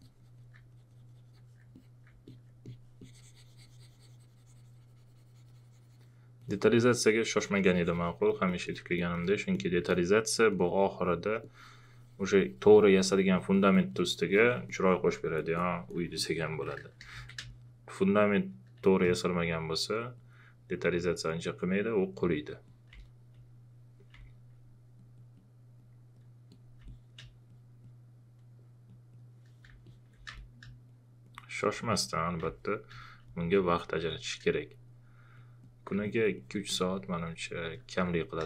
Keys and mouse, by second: 6.4 click, 8.3 alt+click, 9.0 alt+shift+click, 9.9 alt+click, 15.4 alt+click, 16.1 alt+shift+click, 16.4-17.9 typing, 17.5 click, 18.8 click, 22.9 space, 23.0 click, 24.1 space, 24.2 click, 26.8 space, 26.9 click, 29.8 alt+click, 30.3 space, 32.4 space, 32.5 click, 33.2 space.